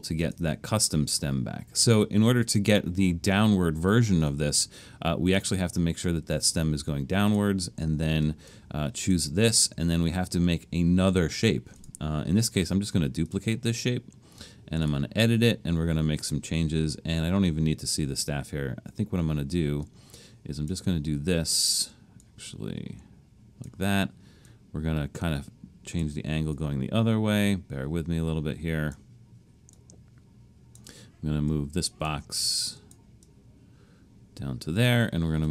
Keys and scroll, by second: 9.0 Return.